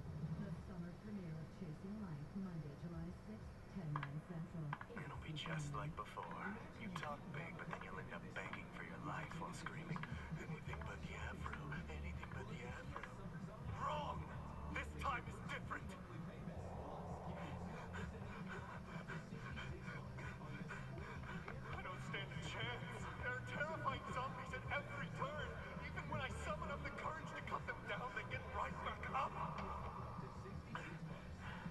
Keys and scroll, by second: 14.9 shift+Down, 15.9 shift+Down, 17.4 Down, 18.9 shift+Down, 21.2 shift+Down, 22.5 shift+Down, 24.7 shift+Up.